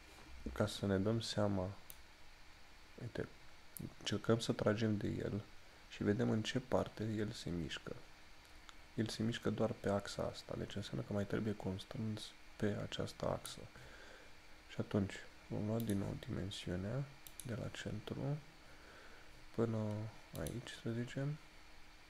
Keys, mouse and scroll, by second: 2.1 click.